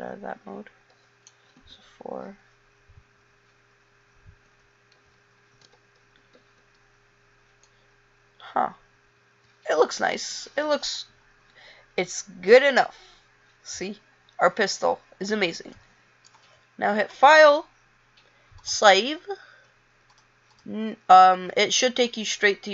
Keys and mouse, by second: 1.8 KP_4, 4.6 KP_6, 5.8 KP_9, 6.3 KP_8, 6.7 KP_7.